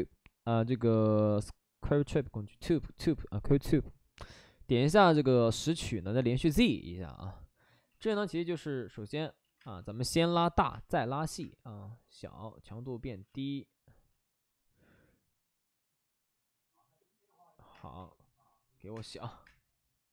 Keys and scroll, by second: 7.8 x, 8.1 space, 9.4 ctrl+z, 9.6-11.8 typing, 13.0 ctrl+z, 13.2 space, 13.9 space, 18.9 3, 19.4 space.